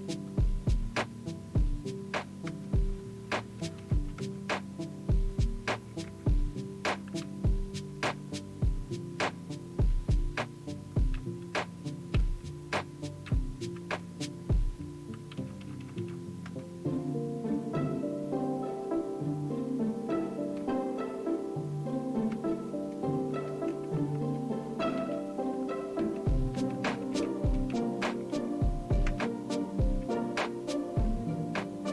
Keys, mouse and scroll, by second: 7.2 Return, 7.8 Down, 8.1 Down, 15.6 Return, 15.8 Return, 16.0 Down, 16.5 Down, 26.0 Down, 27.1 Return, 29.1 space.